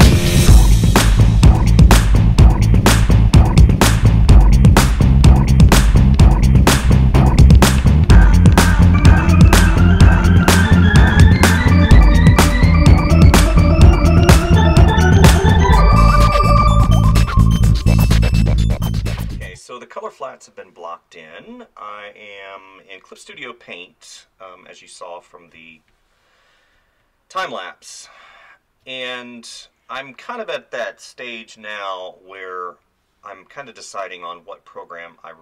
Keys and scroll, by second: 25.6 space.